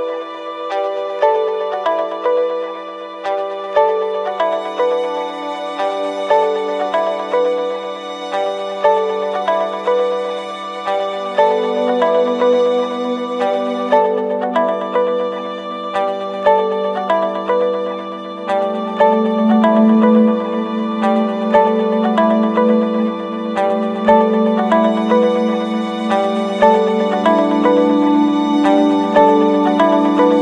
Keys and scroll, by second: 3.7 ctrl+=, 20.6 ctrl+z, 28.0 ctrl+-.